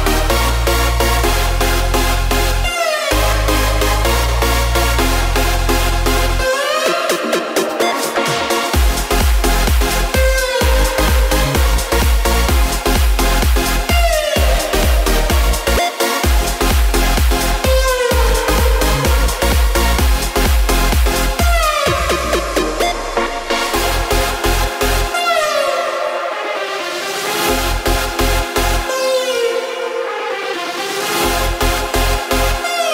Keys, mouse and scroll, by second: 0.8 z, 2.1 space, 9.1-12.8 drag, 13.8-15.8 drag, 15.8 space, 16.9 click, 17.8 shift+click, 18.8 shift+click, 19.9 click, 22.5 ctrl+z, 23.3 shift+click, 24.3 shift+click, 25.4 click, 27.2 ctrl+z, 27.9 shift+click, 28.9-30.1 shift+drag, 30.1 shift+Left, 30.4 shift+Left.